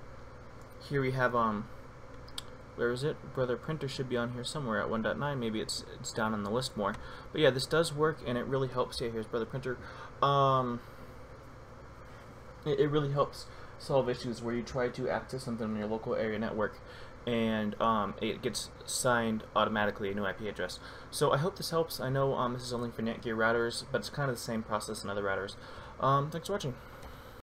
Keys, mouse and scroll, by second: 27.0 F12.